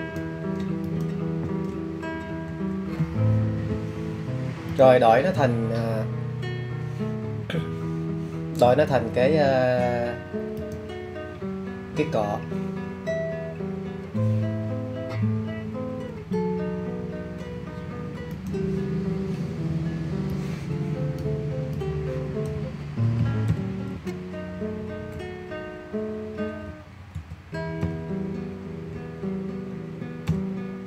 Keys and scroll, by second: 17.9-20.0 typing, 22.1 BackSpace, 22.7 t, 23.9 e, 25.2 r, 27.3 l, 29.3 y.